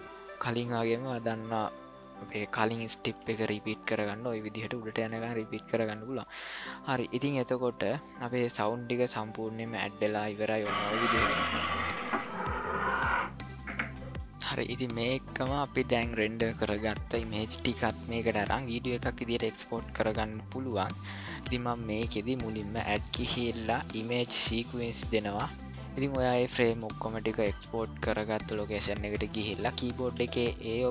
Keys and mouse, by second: 1.3 middle click, 1.5 click, 2.0 middle click, 3.0 shift+r, 4.0 middle click, 7.7 click, 9.7 click, 22.6-25.0 drag.